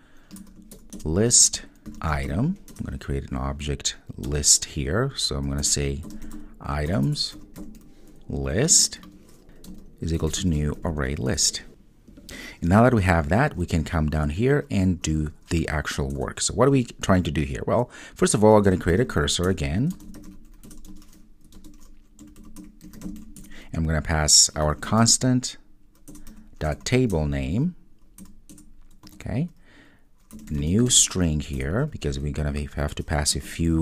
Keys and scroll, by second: 6.2 Return, 8.8 Return, 19.5 Return, 23.4 Return, 31.6 Return.